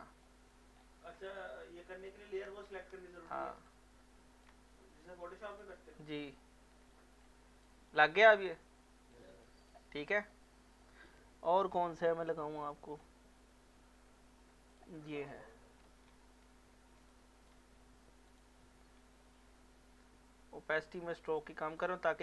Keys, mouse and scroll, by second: 0.2 alt+middle click, 0.8-1.2 scroll down 2, 1.3-3.0 ctrl+drag, 3.0 ctrl+scroll up 1, 3.7-5.5 ctrl+drag, 6.2 scroll up 1, 7.2 alt+scroll up 1, 7.6-9.1 alt+drag, 9.9 alt+middle click, 10.8 alt+middle click, 11.5 scroll down 1, 12.3-12.6 scroll up 1, 12.6 scroll down 1, 14.7 click, 15.3 alt+middle click, 15.8 scroll down 1, 17.1 ctrl+click, 21.4 click.